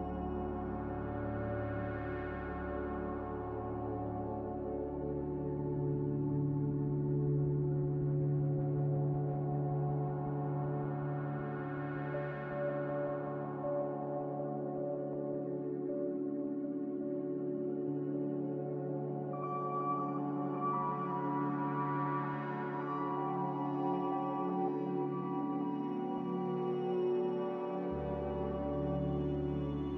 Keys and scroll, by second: 19.2 z, 23.5 typing.